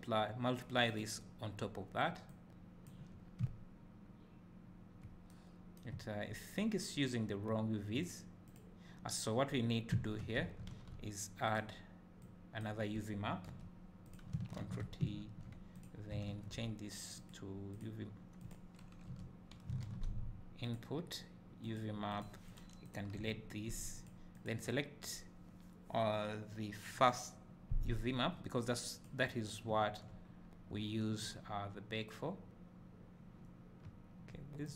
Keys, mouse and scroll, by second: 3.2 scroll down 2, 6.1 `, 6.5-8.0 scroll up 2, 8.5 click, 13.6 Delete, 14.1 click, 14.9 ctrl+t, 15.3 `, 15.8 click, 19.1 Delete, 22.9 click, 23.3 Delete, 24.0 click, 28.0-34.7 drag, 29.7 `, 30.4 scroll up 1, 30.8 `.